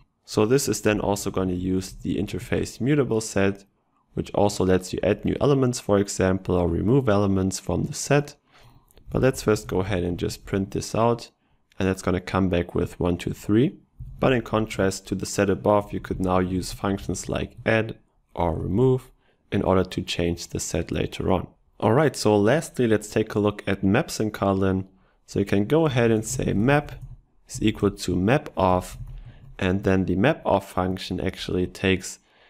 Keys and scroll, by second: 5.0 ctrl+BackSpace.